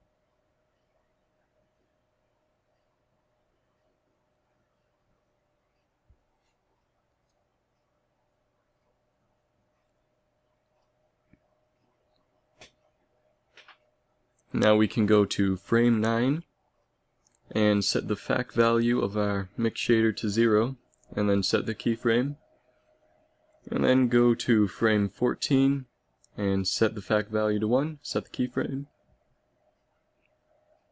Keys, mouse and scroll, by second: 1.6 ctrl+s, 6.9 n, 7.2 n, 14.6-16.2 Left, 16.7 Right, 17.0 Right, 22.3 i, 24.2 Right, 24.4 Right, 24.6 Right, 25.1 Right, 25.8 Right, 28.3 i.